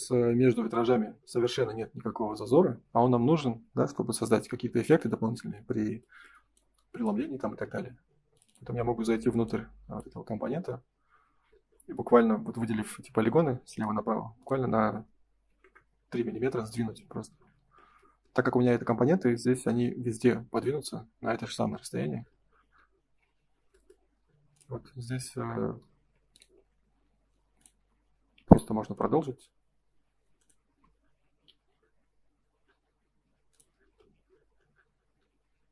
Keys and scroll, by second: 13.5 m, 15.4 3, 15.6 Return, 17.2 space, 17.4 Escape, 21.4 Escape, 22.9 ctrl+s, 27.7 space, 28.3 q, 30.6 space, 31.4 m, 33.6 F3.